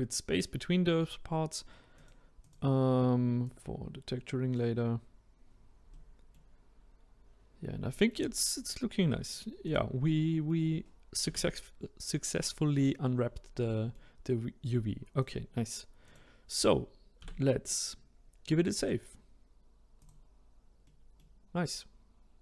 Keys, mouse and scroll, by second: 1.9 click, 2.3 click, 3.4 click, 5.9-7.4 middle drag, 7.4-7.8 scroll down 1, 7.8-9.6 middle drag, 9.6 click, 10.1-11.2 middle drag, 11.2 a, 13.7-15.2 middle drag, 15.2 click, 16.0 click, 17.2 a, 18.7-20.8 drag, 20.8-22.4 middle drag.